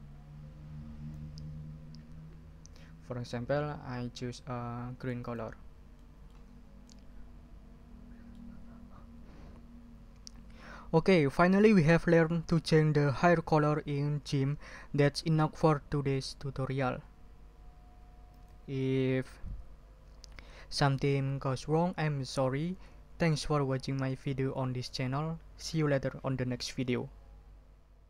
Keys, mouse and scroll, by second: 5.2 click, 6.0 click, 6.3 ctrl+middle click, 6.5 ctrl+scroll down 2, 6.8 ctrl+middle click, 7.1-8.5 ctrl+drag, 18.3 click.